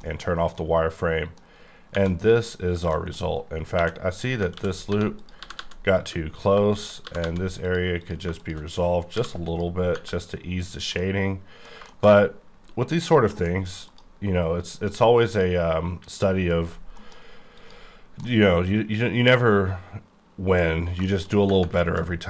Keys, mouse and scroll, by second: 0.0 shift+middle click, 1.4 scroll up 3, 1.9 Tab, 2.9 shift+middle click, 3.3-3.6 scroll up 3, 3.7 2, 4.1 click, 4.5 ctrl+x, 4.9 1, 5.2 click, 5.4 g, 5.5 g, 6.1 click, 6.3 click, 7.1 g, 7.2 g, 7.7 click, 8.0 click, 9.1 m, 9.4 click, 9.9 Tab, 10.2-10.9 scroll down 4, 10.9 middle click, 12.9 click, 13.3 alt+m, 13.8 click, 15.3 click, 16.9 alt+m, 17.5 click, 18.3 middle click, 21.1 shift+middle click, 21.4 scroll up 2, 21.8 shift+middle click, 22.0-22.2 shift+scroll up 5.